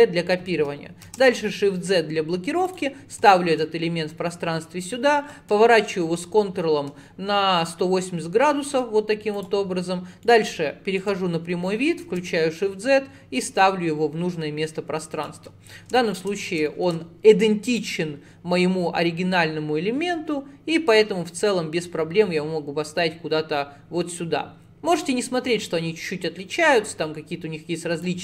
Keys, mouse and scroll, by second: 3.0-3.3 scroll down 1, 3.3-4.9 shift+middle drag, 4.9 click, 9.4 click, 10.3-12.1 middle drag, 12.1 alt+z, 12.4-13.5 scroll down 4, 13.5 click, 15.5-15.9 scroll up 7, 16.0 shift+middle click, 16.4 scroll up 1, 16.7 shift+middle click, 17.1 scroll down 2, 17.8 click, 26.3 click.